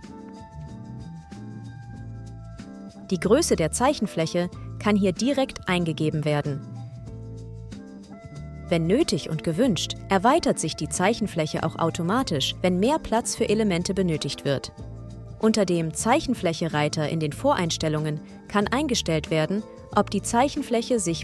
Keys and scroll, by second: 0.0-0.6 typing, 2.8 BackSpace, 2.9 4, 6.1-8.5 typing, 7.3 Tab, 9.0 Tab, 13.0 super+,.